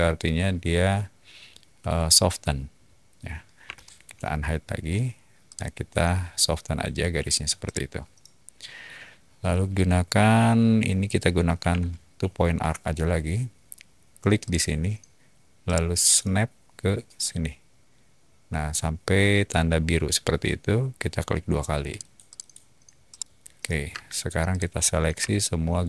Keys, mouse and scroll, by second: 3.6 h, 5.4-6.6 drag, 7.6-8.7 middle drag, 11.4-12.2 typing, 14.4 click, 14.5-17.4 typing, 15.6 middle click, 21.9 click, 22.2 click, 23.1 middle click, 23.8 space, 24.5 click, 25.7 shift+click.